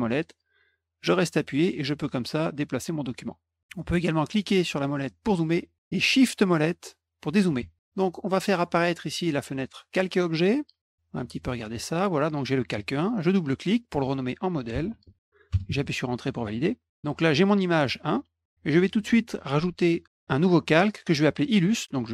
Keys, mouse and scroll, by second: 4.9 middle click, 6.7 shift+middle click, 9.1 click, 9.8 click, 10.8 click, 12.1 click, 13.3 click, 13.4 click, 14.2-15.6 typing, 16.9 click.